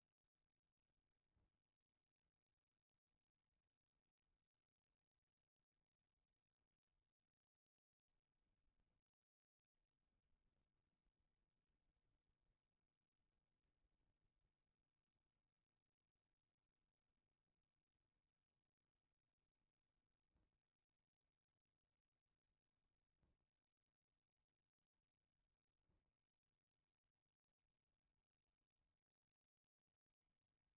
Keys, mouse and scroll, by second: 1.2 click, 2.0-6.9 middle drag, 7.6 click, 8.2 middle click, 9.3 middle click, 10.5 shift+middle click, 11.0-12.1 middle drag, 12.8-15.3 middle drag, 15.8 shift+middle click, 20.0 middle click, 21.1 shift+middle click, 21.9-23.8 middle drag, 24.4-30.2 middle drag, 30.6-30.7 middle drag.